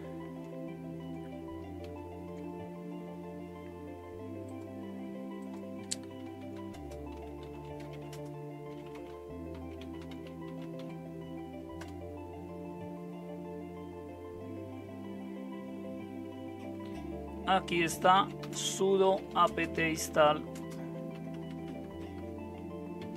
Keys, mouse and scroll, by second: 1.8 super+0, 6.0-11.8 typing, 6.3 click, 17.8-23.1 typing.